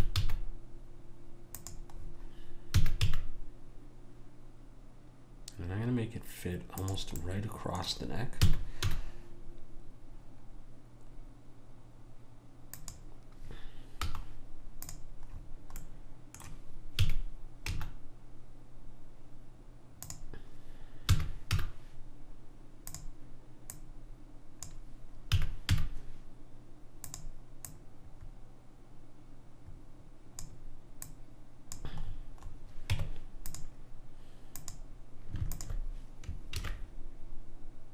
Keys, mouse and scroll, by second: 2.8 s, 7.3-8.4 middle drag, 8.4 s, 14.1 z, 15.4 middle click, 17.0 s, 21.1 s, 23.7 click, 25.4 s, 27.7 click, 31.1 click, 32.9 Tab, 34.6-37.4 drag, 36.6 ctrl+b.